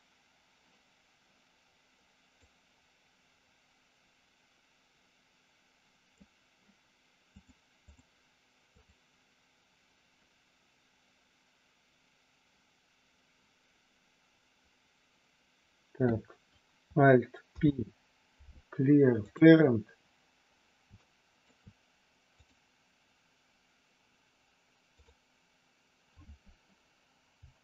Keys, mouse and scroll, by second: 2.5-6.2 drag, 7.3 click, 8.7 click, 21.0 shift+middle click, 22.2 click, 24.9 click, 27.3 g.